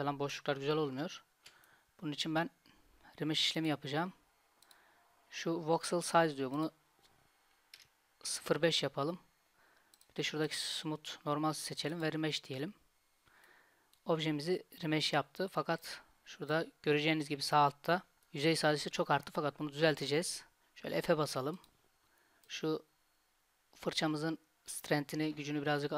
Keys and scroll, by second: 0.9 ctrl+z, 21.0 f.